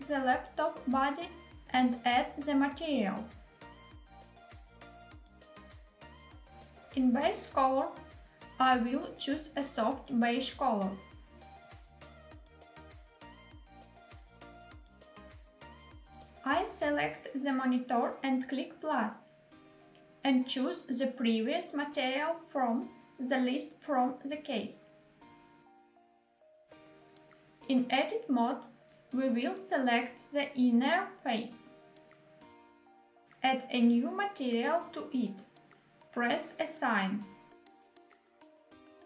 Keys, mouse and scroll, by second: 1.9 click, 3.7 click, 5.9 click, 7.2 click, 16.5 click, 19.5 click, 21.3-22.8 drag, 26.6 shift+middle click, 27.1 Tab, 29.3 3, 30.2 click, 33.3 click, 35.1 click, 36.7 click, 38.1 Tab.